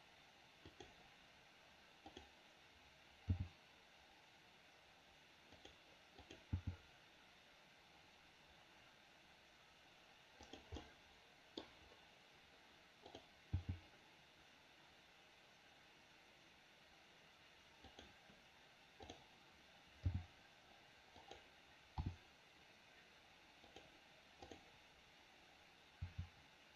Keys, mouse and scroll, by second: 2.1 click, 3.3 g, 6.2 click, 6.5 g, 10.8 middle click, 11.5-12.1 scroll down 1, 13.5 g, 19.0 click, 20.0 g, 22.0 r, 24.4 click, 26.0 r.